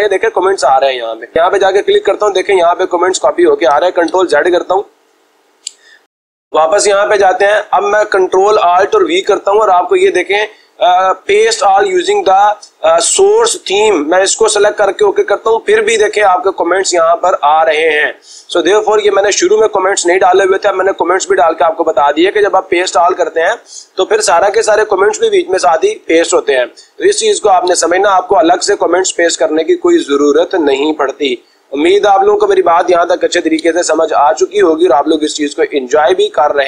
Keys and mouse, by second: 1.3-2.5 drag, 3.3-4.3 drag, 4.4 ctrl+z, 13.4-14.5 drag, 14.9-16.0 drag, 16.7-17.7 drag, 17.8 click, 18.1-19.2 drag, 26.5 ctrl+z, 32.0 click, 33.2 ctrl+y.